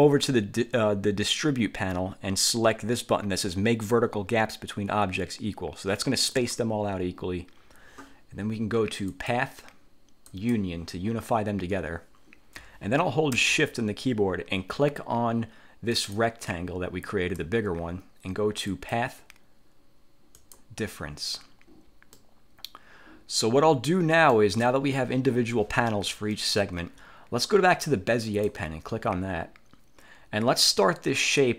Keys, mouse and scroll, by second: 6.5 click, 9.2 click, 10.4 click, 16.1 shift+click, 18.8 click, 20.5 click, 22.3 middle click, 22.3-22.7 scroll up 1, 22.7 click, 23.3 middle click, 23.3-23.7 scroll up 1, 23.7 click, 28.4 click.